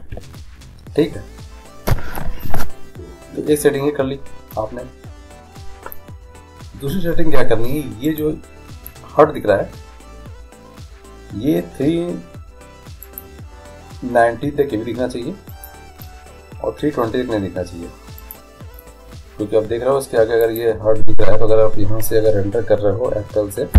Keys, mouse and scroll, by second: 0.0 Escape, 8.5-10.2 right drag, 13.3-15.2 drag, 15.7-17.5 drag, 18.1-20.1 drag, 20.7-22.4 drag.